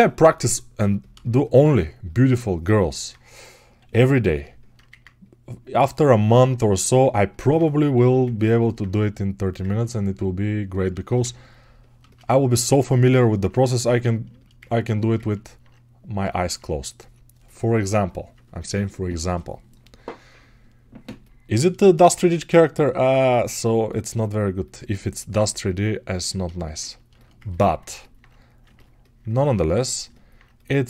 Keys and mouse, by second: 9.7-14.2 drag, 22.1-30.8 alt+shift+right drag.